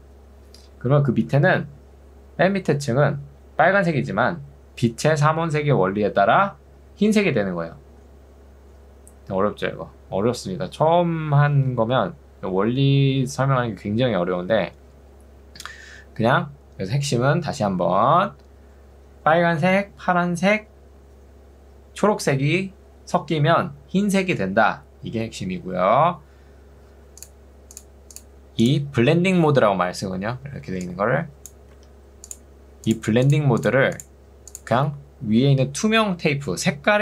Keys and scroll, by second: 30.8 ctrl+2, 31.8 Escape.